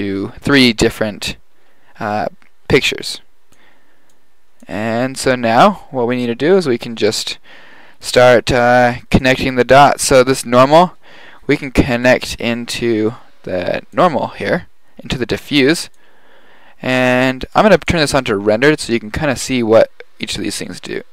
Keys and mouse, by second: 3.4 click, 4.0-4.6 drag, 6.7 g, 8.2-9.4 drag, 10.0-10.7 middle drag, 12.1-12.9 drag, 15.6 click, 20.3-21.1 drag.